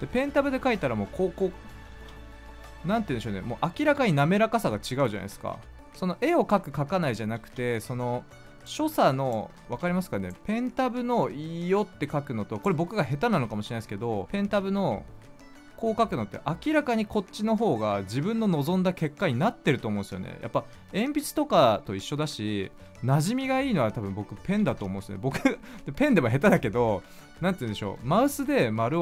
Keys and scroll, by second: 1.9 ctrl+z, 5.3 ctrl+z, 7.3 ctrl+z, 9.6 ctrl+z, 13.2 ctrl+z, 14.3 ctrl+z, 22.7 ctrl+z, 24.6 ctrl+z.